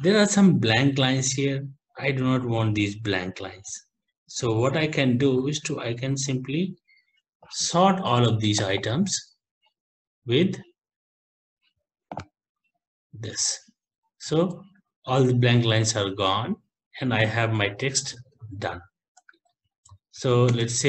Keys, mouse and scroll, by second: 0.5 ctrl+Down, 1.0 ctrl+Down, 1.2 ctrl+Down, 1.4 ctrl+Down, 1.7 ctrl+Down, 1.9 ctrl+Down, 2.1 ctrl+Down, 2.4 ctrl+Down, 2.6 ctrl+Down, 2.7 ctrl+Down, 3.2 ctrl+Down, 3.3 ctrl+Down, 3.5 ctrl+Down, 3.7 ctrl+Down, 3.8 ctrl+Down, 4.1 ctrl+Down, 4.2 ctrl+Down, 4.7 ctrl+Down, 5.0 ctrl+Down, 5.7 ctrl+Down, 6.8 ctrl+Home, 8.8 click, 12.3 click, 13.6 ctrl+Up, 14.8 scroll, 15.4 ctrl+Down, 16.2 ctrl+Up, 17.4 scroll, 18.1 scroll, 18.6 ctrl+Up, 19.4 ctrl+shift+Down, 20.0 ctrl+x, 20.2 Down, 20.5 Return.